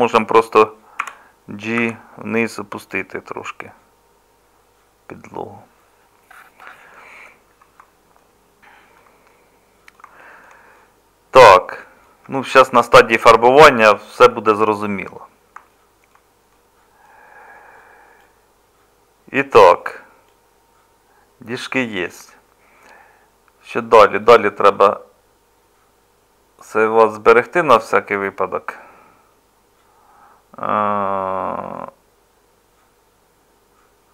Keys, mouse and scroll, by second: 1.0 g, 12.3 Tab.